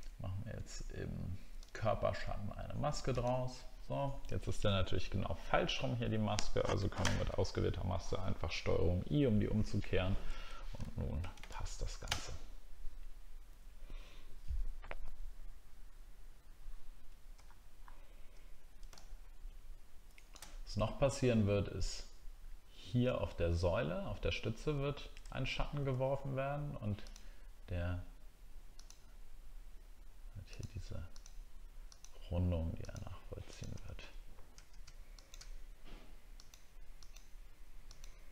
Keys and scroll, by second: 10.8 alt+scroll down 1, 17.4 alt+scroll up 1, 25.3 alt+scroll up 1.